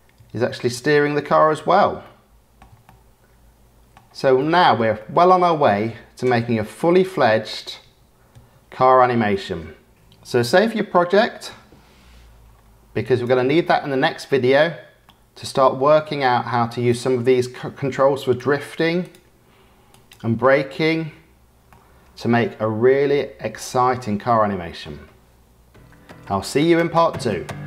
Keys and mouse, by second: 1.2 space, 2.0-2.6 shift+drag, 2.8-3.9 drag, 4.4-4.7 shift+middle drag, 4.9 middle click, 5.4 space, 7.4 space, 7.8 space, 8.3 space, 9.3-9.9 drag, 15.0 middle click, 15.7 click, 16.6 click, 18.2 click, 19.8 click, 21.6-23.0 drag, 24.2 middle click.